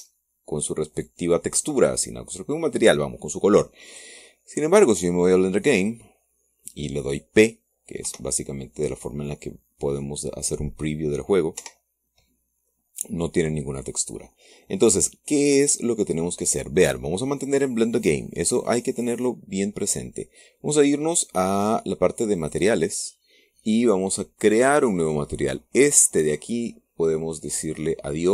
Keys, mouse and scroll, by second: 4.6 click, 6.4 click, 8.7 p, 12.3 Escape, 23.1 click, 25.6 click, 26.6 click, 28.1 click.